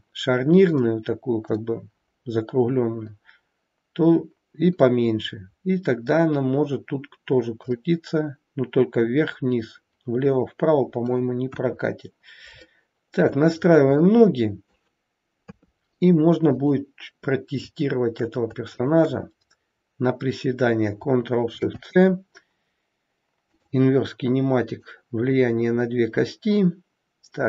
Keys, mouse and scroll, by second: 0.7 middle click, 7.7 middle click, 11.5 KP_1, 12.1-12.7 scroll down 3, 12.7 shift+middle click, 13.3-14.0 scroll up 4, 14.0 middle click, 15.3 KP_3, 16.5 click, 18.7 shift+click, 21.5 ctrl+shift+c, 24.7 click, 25.2 click.